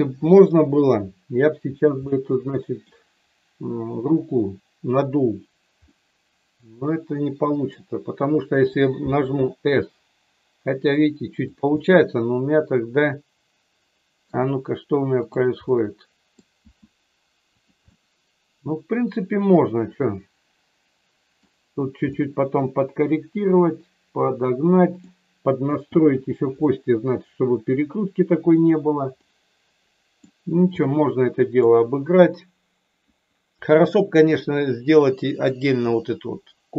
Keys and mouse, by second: 2.1 middle click, 5.8-7.7 middle drag, 9.1 s, 11.6-14.1 middle drag, 15.1 click, 15.6 middle click, 16.6 s, 17.5 click, 17.9-21.3 middle drag, 22.2-24.9 middle drag, 28.5 click, 29.2-30.3 middle drag, 30.8 middle click.